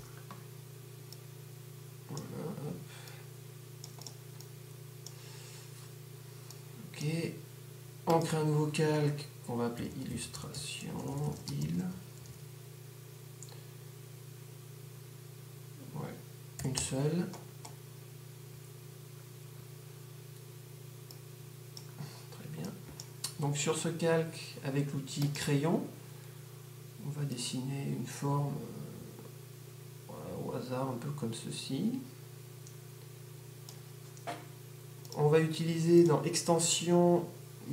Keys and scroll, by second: 9.9-11.9 typing.